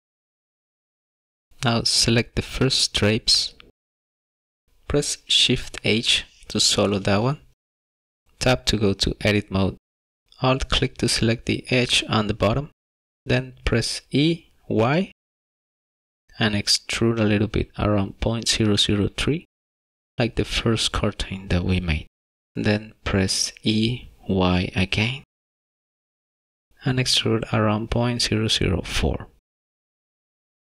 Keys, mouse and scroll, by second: 0.4 scroll down 1, 0.9 scroll up 2, 1.1 middle click, 2.2 click, 5.7 shift+h, 8.2 scroll up 1, 8.3 middle click, 8.8 Tab, 10.2 shift+middle click, 12.2 alt+click, 13.6 e, 14.9 y, 23.1 e.